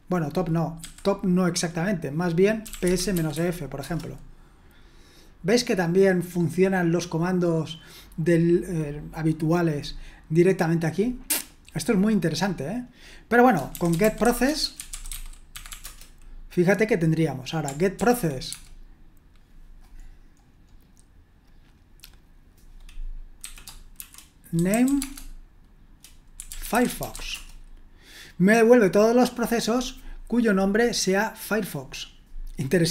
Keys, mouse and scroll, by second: 2.4-3.8 typing, 13.7-16.2 typing, 17.9 ctrl+p, 18.5 space, 19.9-20.4 scroll up 1, 20.4-23.1 scroll down 1, 24.4-27.9 typing.